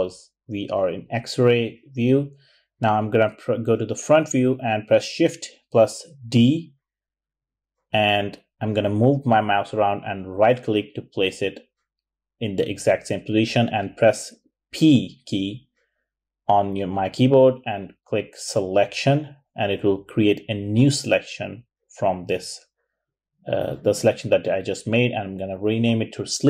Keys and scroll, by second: 2.2 `, 6.3 shift+d, 16.1 p, 21.4-22.6 typing, 23.7 Return.